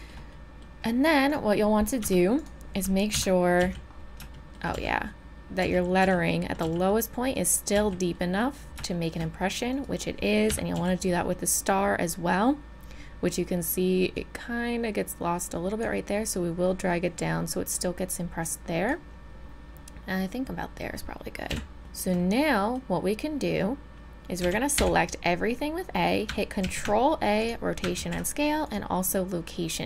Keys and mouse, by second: 2.0 Tab, 3.1 KP_3, 3.6 z, 4.7 z, 5.6 z, 6.0 z, 6.6 z, 7.7 z, 8.1 click, 10.5 KP_3, 10.7 z, 11.5-13.7 middle drag, 14.1-20.3 drag, 20.3-20.7 middle drag, 21.5 KP_1, 21.8 z, 24.4 a, 24.8 a, 26.6 ctrl+a, 28.0 ctrl+a.